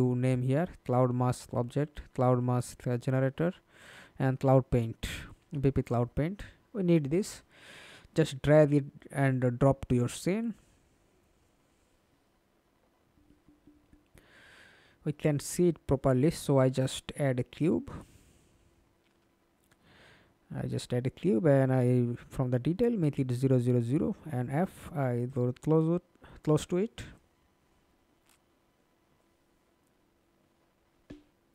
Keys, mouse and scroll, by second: 3.4 ctrl+click, 5.0 ctrl+click, 6.1 ctrl+click, 7.9 f, 8.5 alt+click, 12.9-15.1 scroll up 2, 15.1-18.4 scroll up 1, 21.7-23.6 scroll up 14, 23.6 middle click, 24.4 f, 24.9-25.2 alt+scroll down 1, 25.2 alt+click, 25.9 r.